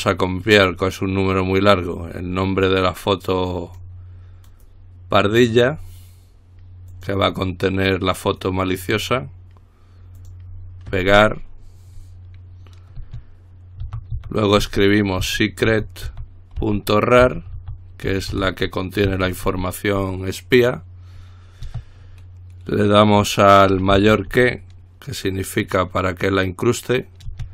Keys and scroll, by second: 14.0-19.6 typing, 24.2 typing.